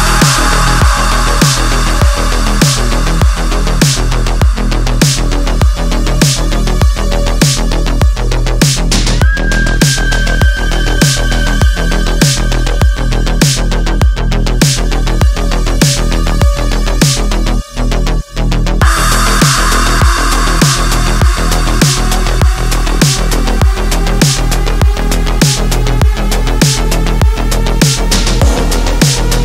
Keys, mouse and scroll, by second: 3.7 shift+Num_Lock, 3.7 click, 3.9 shift+click, 6.4-7.8 typing, 8.3 ctrl+t, 9.2-9.8 alt+shift+drag, 11.5 alt+scroll down 1, 12.2-12.9 click, 14.6 alt+scroll down 1, 14.8 space, 15.1 click, 15.2 space, 15.7 click, 17.7-20.6 typing, 22.0 click, 25.7-26.7 drag, 27.4-27.9 alt+right click, 28.1-28.8 alt+right click, 29.0 space, 29.1-29.4 click, 29.3 space.